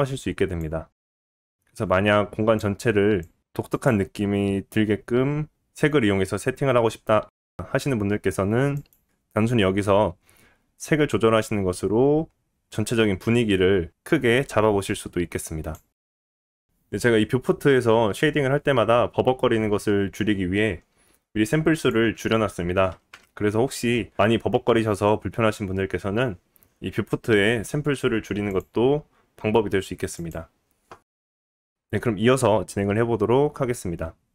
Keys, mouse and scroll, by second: 13.7-14.1 scroll up 2, 21.7-31.1 drag, 31.1-34.3 middle drag, 31.5 scroll down 1.